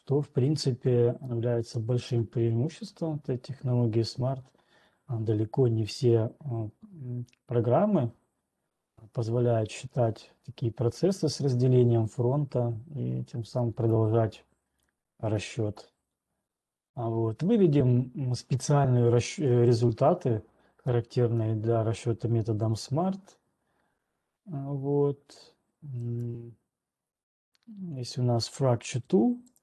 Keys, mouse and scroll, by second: 1.0 scroll, 2.4 scroll, 4.0 scroll down 3, 4.8 scroll, 7.5-9.0 typing, 12.8 typing, 13.9 right click, 15.0 scroll, 15.2-15.6 scroll down 8, 16.0 scroll down 1, 16.9 scroll down 1, 18.1-18.8 scroll down 3, 18.8 scroll, 21.4-22.8 scroll, 22.8-23.4 scroll, 23.4 click, 26.8 right click.